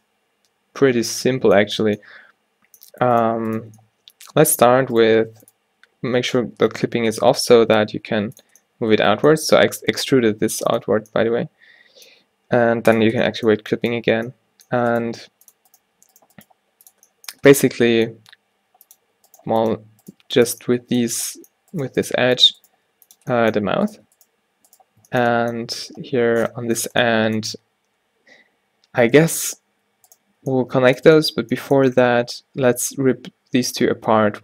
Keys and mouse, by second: 0.3 middle click, 3.2 middle click, 3.9 click, 4.1 middle click, 4.6 e, 6.6 g, 7.6 o, 8.0 g, 10.2 e, 13.0 click, 15.0-18.4 drag, 15.1 g, 15.9 g, 16.5 g, 18.7 g, 19.4-25.7 drag, 19.5 g, 20.2 g, 22.2 g, 22.9 g, 29.6 z, 30.2 click, 31.0-32.1 drag, 33.9 middle click, 34.2 v.